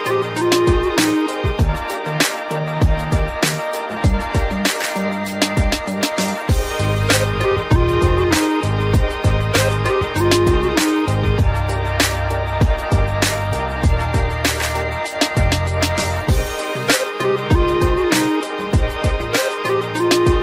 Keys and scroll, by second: 1.2 ctrl+0, 9.0 ctrl+z, 13.4 Return, 15.1 ctrl+0.